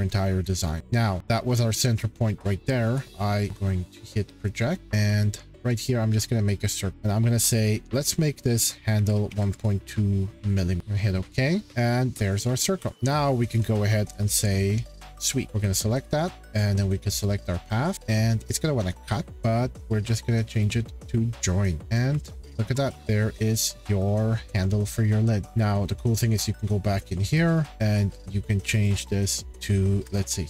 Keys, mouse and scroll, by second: 0.2-0.8 scroll, 1.2 shift+middle click, 2.8 p, 3.2 click, 3.6-4.0 shift+scroll, 4.5 click, 4.9 c, 5.8 click, 8.8-10.3 typing, 10.4 scroll, 10.8 click, 11.6 shift+middle click, 12.3 middle click, 12.8 scroll, 15.2 click, 15.4 click, 15.9 click, 17.2 click, 20.6 click, 21.8-22.2 scroll, 22.8 shift+middle click, 23.4 middle click, 23.4 scroll, 25.4 shift+middle click, 25.5-25.9 scroll, 27.3 click, 27.6 click, 27.9-28.8 shift+scroll, 28.8 click, 29.0 click, 29.9 3, 30.0 Return.